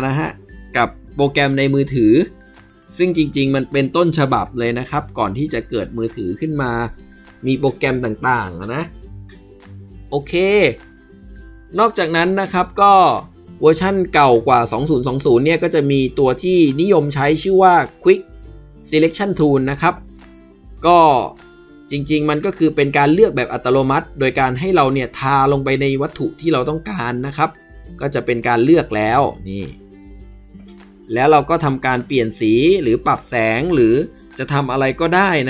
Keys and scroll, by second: 1.3 ctrl+z, 2.9 ctrl+d.